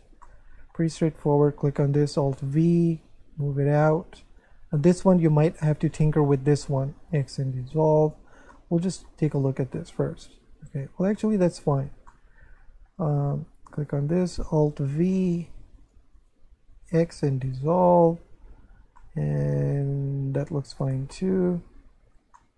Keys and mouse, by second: 0.2 shift+middle click, 1.3 right click, 2.4 alt+v, 3.8 click, 4.4 right click, 5.8 click, 6.2 shift+right click, 7.1 x, 7.6 click, 8.5 middle click, 9.3 Tab, 9.7 middle click, 11.6 Tab, 12.1 shift+middle click, 13.8 right click, 14.9 alt+v, 15.7 click, 16.1 shift+right click, 16.9 x, 17.3 click, 18.0 Tab, 19.0 middle click, 21.1 shift+middle click, 22.0 Tab, 22.4 shift+middle click.